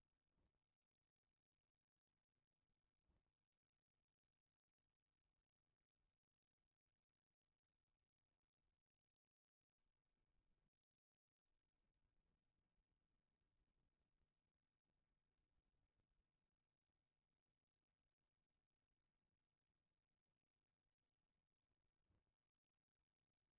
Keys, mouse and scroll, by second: 1.6-4.4 drag, 5.0-5.9 drag, 7.5 click, 8.1-13.2 middle drag, 13.2-14.0 drag, 21.5 middle click.